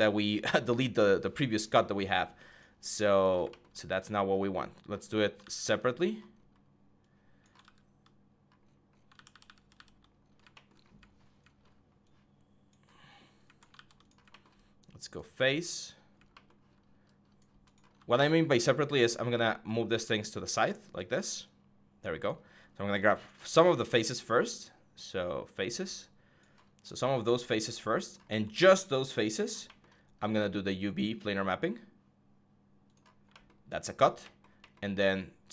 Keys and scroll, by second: 5.2 ctrl+z, 7.4 ctrl+z, 8.9 ctrl+z, 9.1 ctrl+z, 9.2 ctrl+z, 9.4 ctrl+z, 13.5 ctrl+z, 17.9 w.